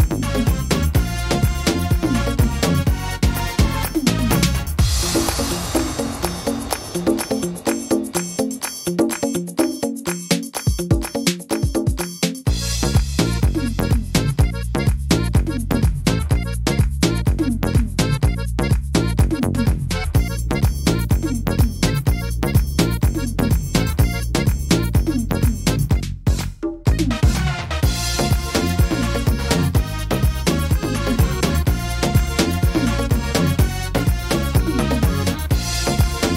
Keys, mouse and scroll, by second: 5.4 middle click, 6.5 middle click, 7.3 right click, 7.9 alt+shift+right click, 8.5 alt+shift+right click, 9.8 ctrl+z, 10.4 alt+shift+right click, 11.5 click, 13.1 middle click, 14.2 s, 19.4 click, 19.4 middle click, 19.9 scroll up 3, 20.3 middle click, 21.0 scroll down 1, 21.3 middle click, 22.3 right click, 23.0 shift+right click, 23.3 right click, 23.8 shift+right click, 24.2 right click, 24.9 right click, 25.5 shift+right click, 25.8 shift+right click, 26.2 shift+right click, 27.4 e, 29.0 click, 30.4 middle click, 30.8-31.3 scroll down 4, 31.5 middle click, 34.1 click, 36.2 ctrl+r.